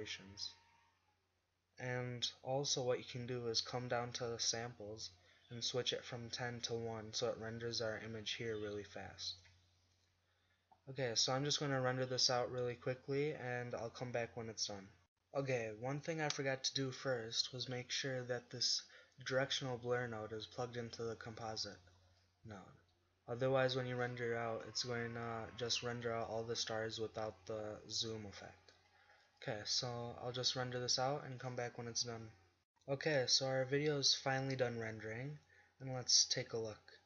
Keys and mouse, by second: 8.9 click, 26.0 g.